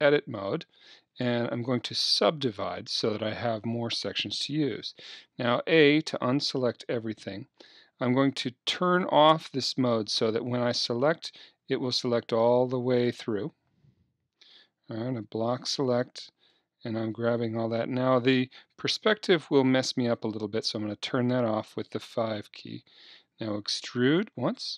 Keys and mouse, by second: 0.0 Tab, 2.3 click, 3.9-5.2 drag, 5.2 a, 8.4-15.2 drag, 15.2-16.7 middle drag, 15.2 b, 20.3 KP_5, 23.4 e.